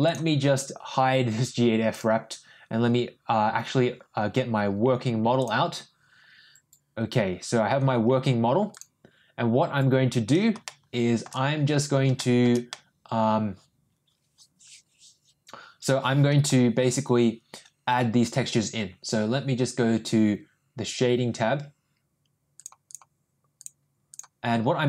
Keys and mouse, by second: 1.8 click, 5.5 click, 10.6 shift+middle click, 12.1 shift+middle click, 12.7 middle click, 13.3-16.4 middle drag, 22.5 click, 22.8 click.